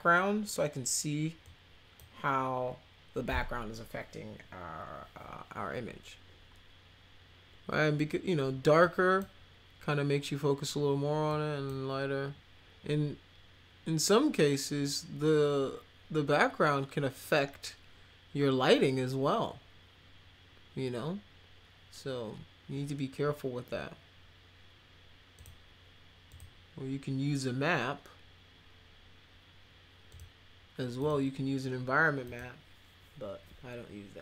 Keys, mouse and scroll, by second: 1.4 click, 8.8 click, 11.3 click, 25.4 click, 26.3 click, 30.1 click, 31.0 click, 32.2 click.